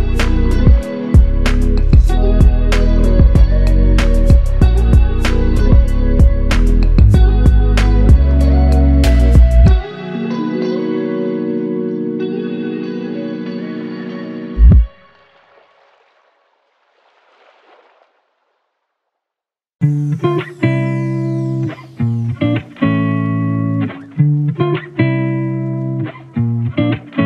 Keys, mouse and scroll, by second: 0.6 shift+click, 2.9 shift+l, 5.1 alt+click, 5.7 ctrl+click, 6.6 ctrl+i, 11.8 alt+click, 13.5 alt+shift+click, 21.0 f, 23.2 alt+click, 25.9 double click.